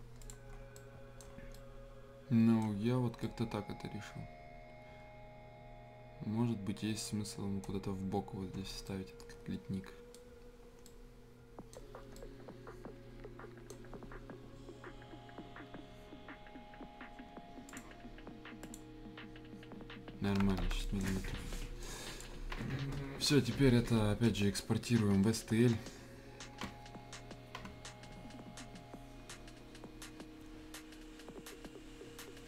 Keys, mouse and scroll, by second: 0.2 click, 0.5 scroll down 1, 0.7 right click, 1.2 scroll down 1, 1.5 right click, 2.7 scroll up 1, 3.2-8.5 right drag, 8.5 scroll down 1, 8.8-13.8 right drag, 13.8-15.3 scroll up 1, 17.6 click, 20.4 Escape, 20.6 scroll down 1, 20.8 right click, 21.1 scroll down 1, 21.5 scroll up 1, 21.8-24.2 drag, 24.2 right click, 25.3 scroll down 1, 26.9-28.9 scroll up 1, 28.9-30.5 scroll down 1.